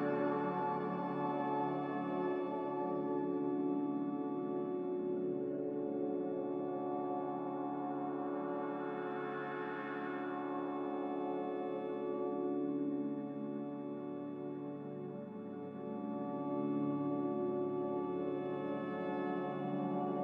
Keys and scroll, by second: 6.5 b, 14.6 m, 17.3 b.